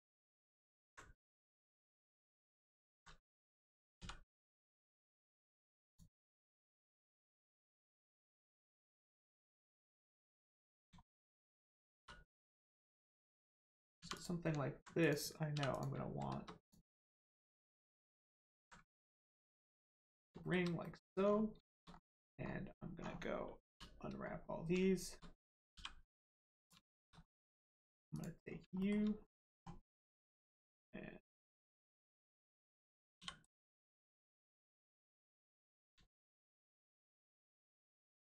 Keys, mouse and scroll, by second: 0.1 shift+click, 0.7 shift+click, 1.2 shift+middle click, 2.4 alt+shift+click, 4.0 alt+x, 5.8 click, 8.4 middle click, 8.9 scroll down 1, 9.2 middle click, 10.2 scroll up 1, 10.4 middle click, 11.0 shift+middle click, 11.3 middle click, 11.4 middle click, 12.6 click, 14.0 2, 14.1 click, 15.0 click, 15.5 3, 15.7 click, 16.6 alt+click, 17.4 click, 19.1 ctrl+click, 19.8 middle click, 20.1 scroll down 1, 20.4 shift+middle click, 20.8 middle click, 20.8 middle click, 21.2-21.5 scroll down 1, 21.6 shift+middle click, 21.8 scroll up 1, 23.0 scroll down 1, 24.2 scroll up 1, 25.7 g, 26.5 click, 26.8 shift+middle click, 27.1-27.7 scroll up 1, 28.1 click, 28.4 scroll down 1, 28.7 shift+middle click, 29.2-29.5 scroll up 1, 33.4 right click, 34.5 click, 36.0 shift+middle click, 37.1 click, 37.5-37.8 scroll up 1.